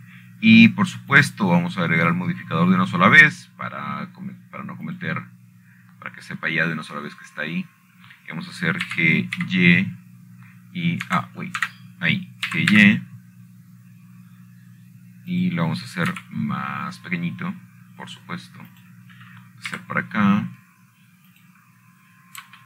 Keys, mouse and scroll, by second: 0.0-1.6 typing, 2.3 Return, 3.9 click, 7.6-8.7 drag, 9.1 scroll down 2, 9.4 scroll up 1, 9.5 scroll down 1, 11.6 g, 12.1 y, 13.8 Escape, 14.3 Tab, 15.2 g, 15.5 y, 18.0 click, 18.9 s, 21.4 click, 22.4 g.